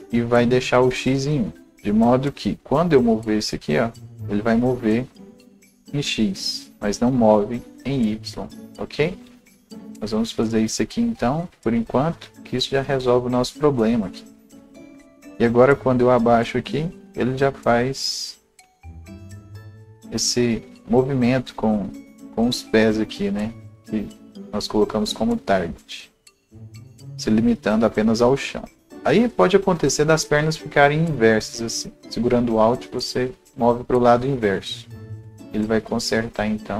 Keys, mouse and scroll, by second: 0.0 Return, 2.3 click, 3.0-15.4 drag, 11.7 ctrl+z, 15.4-27.0 drag, 24.4-25.0 scroll, 26.0-31.2 right drag, 26.0 scroll up 1, 27.0-32.0 drag, 30.7-31.2 scroll up 1, 32.0-35.1 alt+drag, 35.1-36.7 alt+drag, 36.6 scroll down 1.